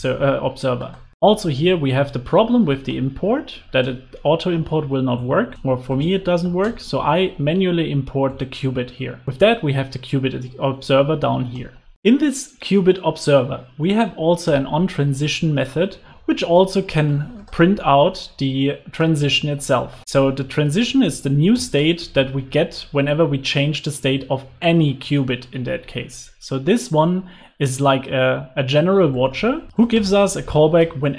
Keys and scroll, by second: 1.1 Escape, 3.9 Return, 10.4 alt+super+l, 10.7 super+s, 14.4 Return, 16.0 super+x.